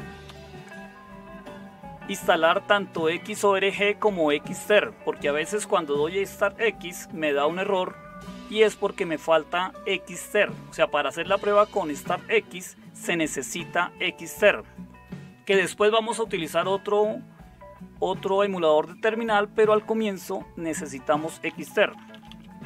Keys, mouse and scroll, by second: 0.2 Up, 3.2 Up, 4.0 Up, 21.1 Down, 21.3 Down, 21.5 Down, 21.7 Down, 21.8 Down, 22.0 Down, 22.1 Down, 22.3 Down.